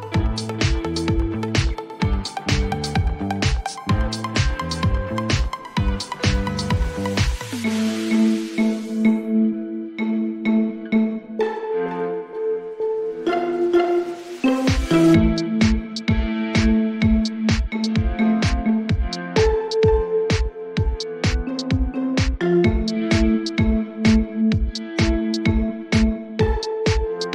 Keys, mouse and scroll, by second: 1.0 click, 1.8-2.2 typing, 2.7 Return, 4.4 click, 5.3 click, 8.0 click, 9.0-10.8 typing, 12.4 click, 12.6 click, 17.0 click, 23.6 click, 26.2 click, 26.8-27.3 typing.